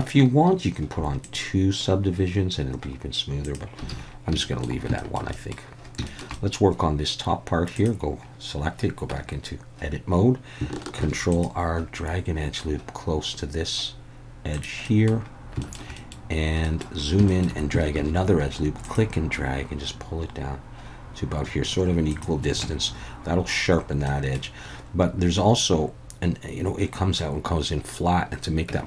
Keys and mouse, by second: 1.3 click, 3.9 alt+a, 4.4 shift+middle drag, 5.0 shift+middle drag, 5.3 middle click, 6.0 shift+middle drag, 6.4 middle click, 7.7-9.1 drag, 9.1 Tab, 11.0 ctrl+r, 14.5 click, 14.9 middle click, 15.7 shift+middle click, 16.0 middle click, 16.7 middle click, 17.3 shift+middle click, 18.0 ctrl+r, 22.1 click, 22.6 Tab, 24.1 middle click, 28.7 Tab.